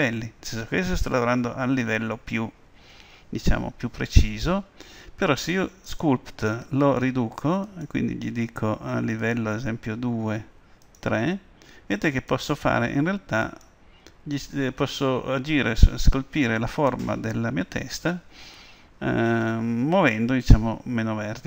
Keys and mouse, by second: 5.9-15.3 drag.